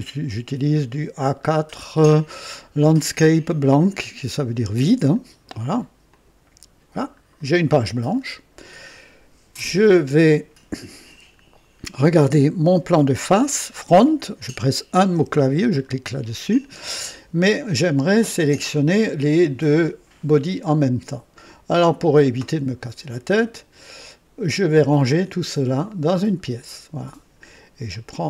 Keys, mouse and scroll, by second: 1.2 scroll down 2, 5.0 click, 6.0 click, 7.3 scroll down 1, 8.1 right click, 9.5 click, 15.1 KP_1, 15.6 click, 16.4 scroll down 1, 16.9-17.7 right drag, 18.6 click, 26.0 click, 27.8 click.